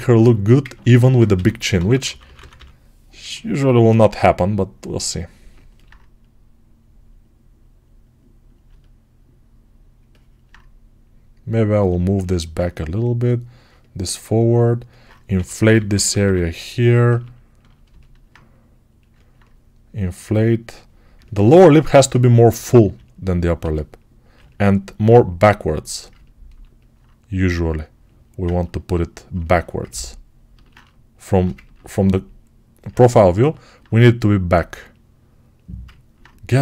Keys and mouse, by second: 1.2 g, 1.6 ], 1.8 ], 3.0-5.3 ctrl+drag, 5.3-36.6 ctrl+right drag, 15.2 6, 15.6 [, 15.8 [, 23.5 g.